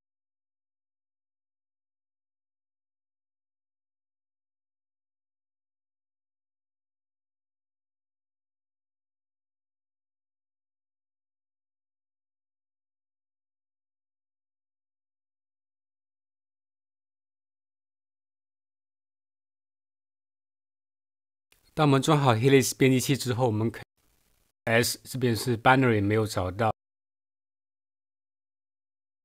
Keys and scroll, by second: 0.4 F6, 0.5-1.6 typing, 1.6 Return, 3.3-4.6 typing, 6.0-9.8 typing, 23.9 Right, 24.5 typing.